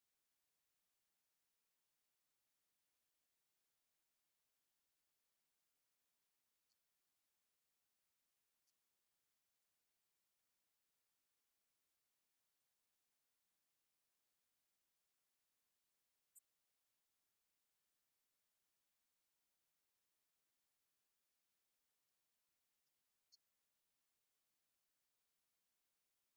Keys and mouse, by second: 0.0 click, 0.6 click, 1.0 click, 1.3 click, 1.7 click, 2.6 click, 17.7 right click, 18.1 middle click.